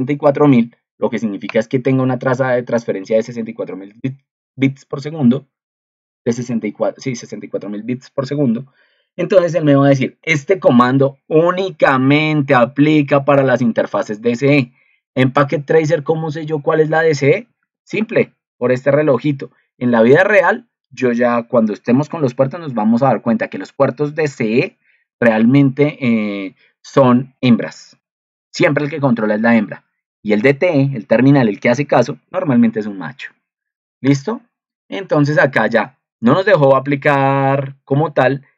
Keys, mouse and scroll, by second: 11.4 ctrl+2, 17.6 ctrl+2.